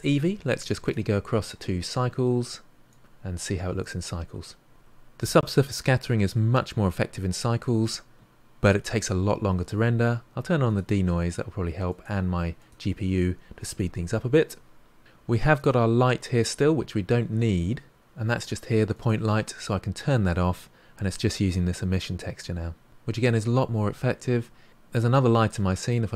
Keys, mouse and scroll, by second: 4.6 click, 10.6 click, 11.9-15.0 drag, 15.3 click, 18.9 click, 24.7-25.7 scroll down 3, 25.7 click.